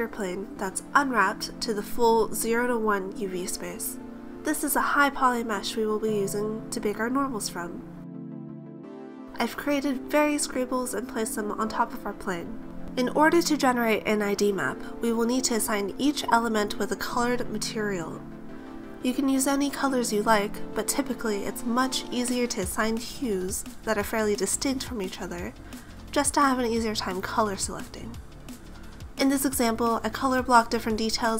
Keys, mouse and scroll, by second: 1.9 Tab, 2.3 a, 4.1 alt+h, 5.4 a, 6.3 scroll up 2, 6.6 middle click, 7.5 right click, 8.0 right click, 8.5 middle click, 9.5 middle click, 10.3-10.6 scroll up 3, 11.0 right click, 12.4 right click, 13.6 right click, 13.8-14.4 scroll down 6, 14.2 middle click, 14.7-15.5 scroll up 6, 15.5 g, 15.7 scroll up 1, 15.7 z, 16.9 click, 17.1 ctrl+z, 17.5 a, 17.7 middle click, 19.9 right click, 20.5 middle click, 20.9 t, 21.0 t, 21.0 n, 21.7 click, 22.1 scroll down 4, 22.2 middle click, 22.5-23.1 scroll up 4, 23.9 middle click, 24.0 scroll down 4, 24.2 a, 24.4 scroll up 1, 24.6 middle click, 25.5 click, 25.9 click, 26.0 middle click, 26.3 right click, 26.9 click, 27.3 click, 27.5 click, 27.6 shift+b, 27.6 a, 27.6 s, 27.7 e, 28.0 KP_Enter, 28.0 click, 28.7 click, 29.3 middle click, 29.6 right click, 29.8 middle click, 29.9 g, 29.9 z, 30.2 click, 30.3 middle click, 30.7 click, 30.9 click, 31.0 middle click.